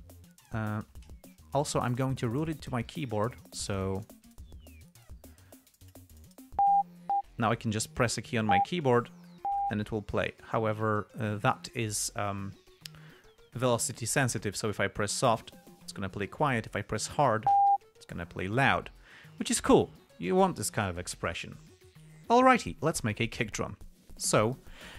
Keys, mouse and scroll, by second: 0.0 click, 0.3 k, 3.2 click, 4.3 click.